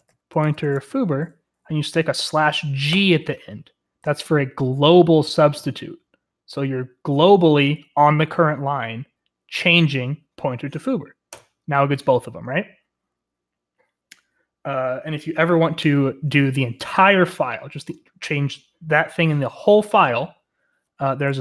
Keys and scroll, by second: 0.0-2.9 typing, 11.3 Return.